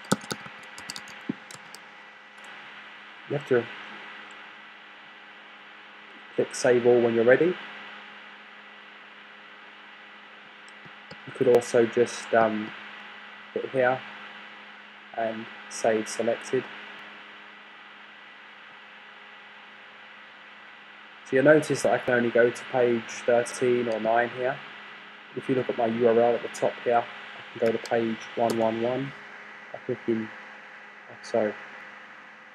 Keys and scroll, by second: 0.0-2.1 typing, 28.2 1, 29.0 Return, 30.5 typing.